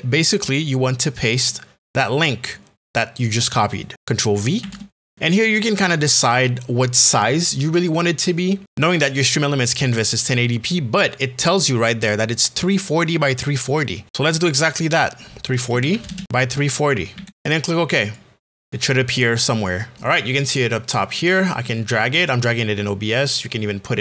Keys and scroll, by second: 4.6 ctrl+v, 15.7 KP_3, 15.9 KP_4, 16.1 KP_0, 17.1 KP_3, 17.3 KP_0.